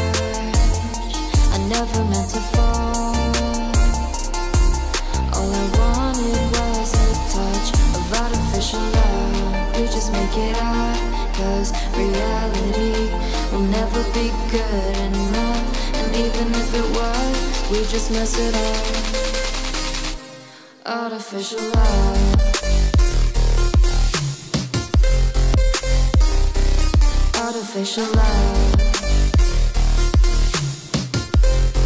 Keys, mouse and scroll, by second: 0.0-0.5 typing, 0.8 Return, 1.5 shift+Return, 1.6-11.7 typing, 2.6 Right, 5.3 Return, 11.7 Return, 12.2 ctrl+s, 12.8-13.3 typing, 13.1 Return, 13.7 ctrl+s, 14.0 Right, 14.5 Return, 14.9-17.7 typing, 16.3 Return, 18.2 ctrl+s, 18.8 Down, 19.2 scroll down 1, 19.6 click, 19.9 Return, 20.5 shift+Num_Lock, 20.6-24.6 typing, 23.0 Return, 25.0 Down, 25.8 Down, 26.0 Return, 26.6-28.5 typing, 28.8 shift+Left, 29.1 shift+Right, 29.8 ctrl+c, 29.9 Down, 30.0 Right, 30.2 Up, 30.4 Right, 31.0 scroll down 1, 31.2 click, 31.4 Return, 31.6 ctrl+v, 31.7 Return.